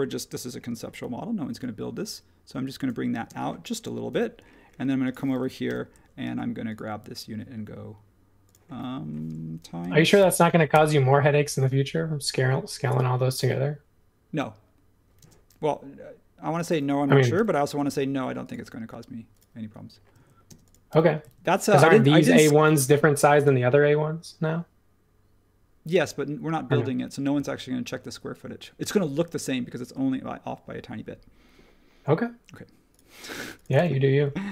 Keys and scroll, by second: 3.2 space, 4.1 super+1, 5.6 m, 9.8 x, 10.2 x, 10.7 Return, 15.2 space, 17.3 m, 20.1 super+z, 22.7 space.